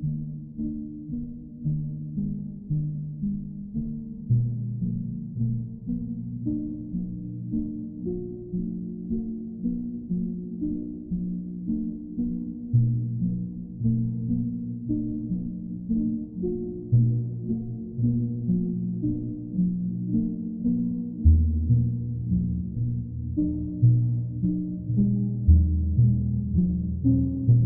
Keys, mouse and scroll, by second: 5.7 click, 6.3 click, 6.8 click, 7.2 shift+click, 7.2 shift+click, 8.0 alt+click, 9.7 click, 10.0 shift+click, 12.5 alt+click, 13.7 alt+click, 15.3 click, 18.5 click, 19.7 q, 21.7 click, 22.1 ctrl+z, 24.8 click, 25.5 alt+click, 26.2 click, 26.9 alt+click.